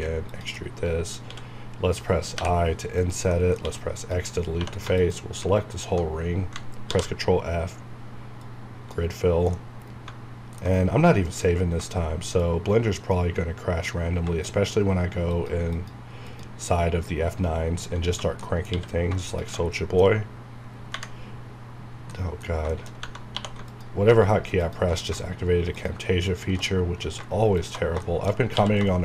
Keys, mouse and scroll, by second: 0.3 click, 0.5 middle click, 1.3 x, 3.0 click, 3.3 middle click, 3.6 x, 3.9 click, 4.6 2, 5.0 alt+click, 6.9 ctrl+f, 8.4 click, 9.3 scroll down 1, 9.5 middle click, 10.8 scroll up 1, 11.3 F9, 12.4-15.3 shift+drag, 17.6-18.0 scroll down 1, 18.1 Tab, 18.1 Right, 18.4 middle click, 19.1 q, 19.3 shift+click, 22.7 shift+middle click, 22.9 shift+scroll up 2, 23.0 Tab, 23.3 2, 23.7 alt+click, 26.9 scroll down 1, 27.6 alt+shift+click, 28.0 middle click, 28.3 scroll up 1, 28.6 q.